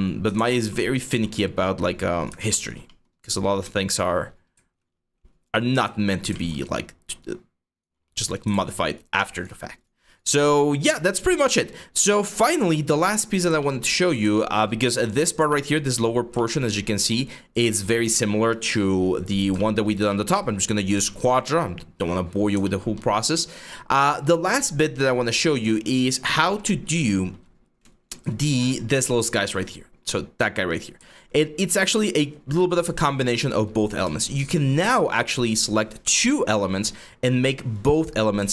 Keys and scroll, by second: 0.0 ctrl+z, 0.8 w, 4.4-6.1 typing, 8.1 ctrl+z, 31.1 5.